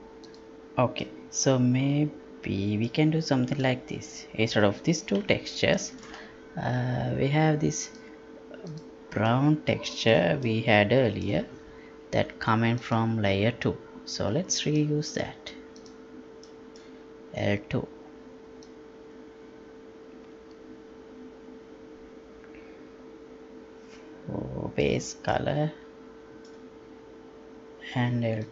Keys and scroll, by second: 5.2 Delete.